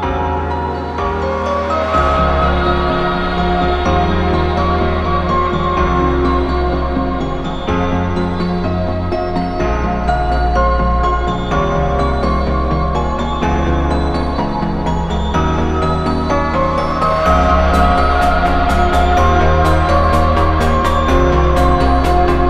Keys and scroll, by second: 7.3 ctrl+z, 8.3 b, 8.9 ctrl+z, 11.7 ctrl+z, 16.6-18.7 scroll down 1, 18.7 ctrl+z.